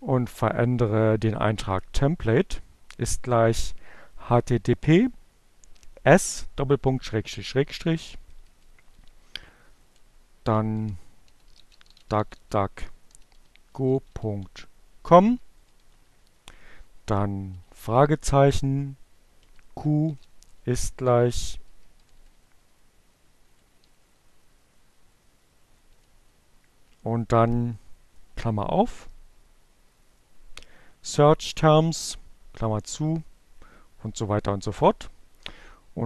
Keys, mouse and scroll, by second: 3.1 Right, 5.3 Delete, 9.5 Delete, 10.2-14.3 typing, 18.2 q, 19.0 shift+0, 19.7 Left, 20.7 Delete, 20.9 Right, 21.0 Delete, 22.2 Delete, 28.4 Right, 31.1 Left.